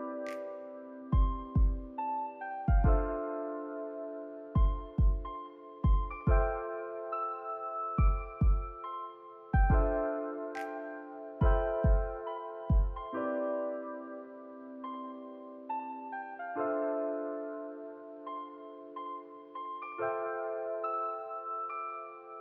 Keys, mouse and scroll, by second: 1.1 click, 1.3-1.9 scroll down 3, 1.9 shift+middle click, 2.0 scroll down 1, 2.2 middle click, 2.8 click, 2.9 middle click, 3.2 scroll up 2, 3.3 middle click, 3.9 s, 4.1 shift+y, 4.5 a, 4.8 s, 8.4 middle click, 8.9 scroll down 2, 9.0 shift+middle click, 9.8 s, 11.2 middle click, 11.8 g, 12.8-13.2 middle drag, 13.2 scroll down 1, 13.4 click, 13.6-14.1 middle drag, 14.1 Tab, 14.3 click, 14.4 Tab, 14.6-15.1 middle drag, 15.1 ctrl+r, 17.2 middle click, 17.5-18.4 scroll up 1, 18.4 ctrl+r, 19.4 middle click, 19.8-20.4 scroll down 2, 20.0 middle click, 20.4-20.7 shift+middle drag, 20.7-21.0 scroll up 1, 21.9 KP_1.